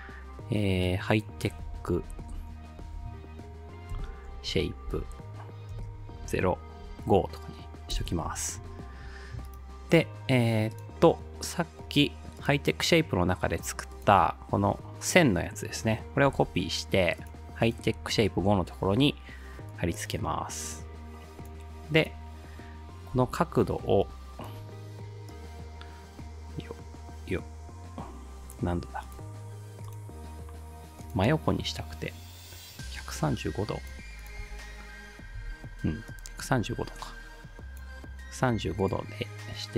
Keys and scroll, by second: 1.4-6.8 typing, 8.0 Return, 16.3 ctrl+c, 18.2 ctrl+v, 23.2 r, 34.4 space, 35.4 space.